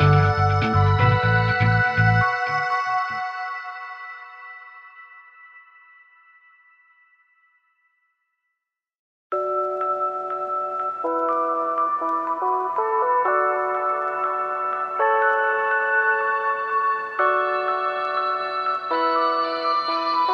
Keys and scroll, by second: 15.9 ctrl+z.